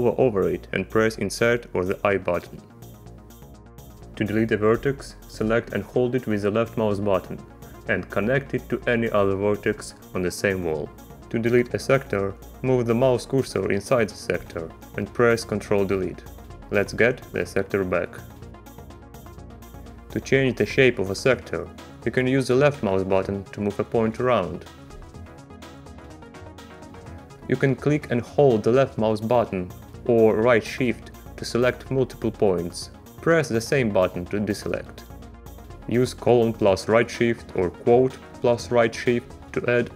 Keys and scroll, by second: 0.5 i, 14.0 ctrl+Delete, 16.6 space, 35.4 ;, 37.3 shift+'.